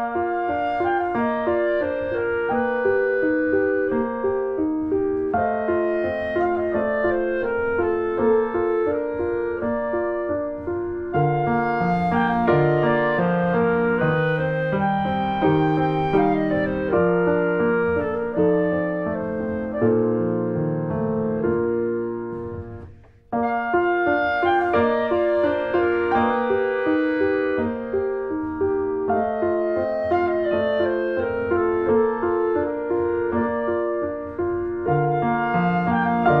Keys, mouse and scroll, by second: 0.9 middle click, 1.2 Tab, 1.3 click, 1.8-2.1 scroll up 1, 2.5 right click, 2.7 middle click, 3.3 Tab, 3.5-3.9 scroll up 1, 3.9 click, 4.2 shift+click, 4.7 shift+click, 5.0 middle click, 5.6 shift+click, 5.9 shift+middle click, 6.4 shift+click, 6.7 shift+middle click, 7.4 shift+click, 7.9 middle click, 8.7 ctrl+b, 12.3 middle click, 12.9 scroll down 1, 13.1-14.7 shift+middle drag, 14.7 ctrl+s, 15.1-18.2 middle drag, 18.2 e, 19.4-21.2 middle drag, 21.2 click, 21.9 ctrl+z, 24.6 click, 26.5 shift+middle click, 27.3 s, 29.4 middle click, 29.6 Tab, 29.7 click, 30.0 middle click, 30.4 click, 30.5 right click, 31.2 click, 31.6 ctrl+1, 31.9 ctrl+2, 32.1 click, 32.3 middle click, 32.5 click, 32.8 middle click, 33.0 ctrl+s, 33.1 click, 33.4 shift+middle click, 33.6 Tab, 33.8-34.7 scroll up 2, 34.1 middle click, 34.8 alt+middle click, 35.7 shift+middle click, 35.8-36.4 scroll up 2, 36.0 Tab.